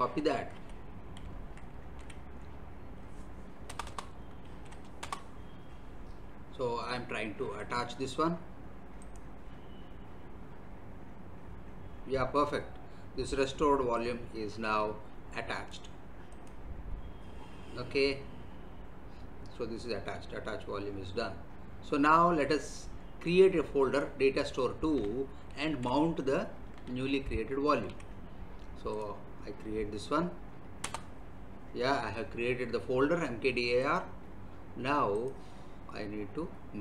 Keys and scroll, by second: 0.5 alt+Tab, 3.7 Return, 4.5 ctrl+v, 5.0 Return, 25.5 ctrl+c, 27.0 alt+Tab, 30.8 Return.